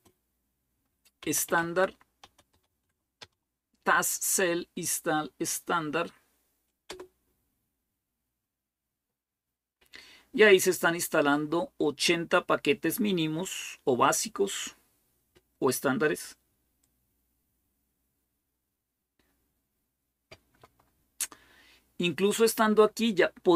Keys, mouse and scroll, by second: 0.0-3.5 typing, 6.7 Return.